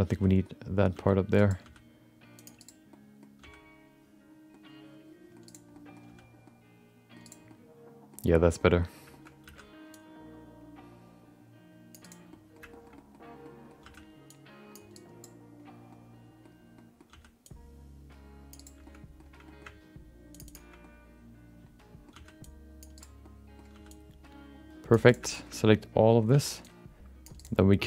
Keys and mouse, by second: 0.0 c, 1.6 c, 2.9 middle click, 3.4 c, 5.7 middle click, 6.0 c, 7.4 middle click, 8.5 middle click, 9.1 shift+middle click, 9.4 c, 12.3 middle click, 12.7 shift+middle click, 12.9 middle click, 13.4 middle click, 13.8 c, 15.9 middle click, 16.8 middle click, 17.1 c, 18.8 shift+middle click, 19.4 middle click, 20.3 click, 20.8-22.0 middle drag, 22.1 c, 23.2 middle click, 23.7 c, 25.3 shift+middle click, 25.5 middle click, 26.1 middle click, 26.3 c, 27.5 middle click.